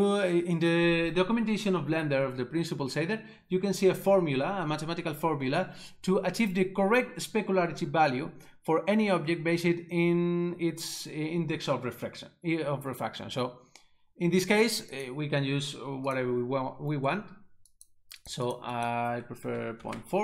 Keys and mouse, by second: 15.0 click, 17.8 click, 18.2 double click, 18.5 click, 18.8 double click, 19.5 ., 19.8 4, 19.9 Return.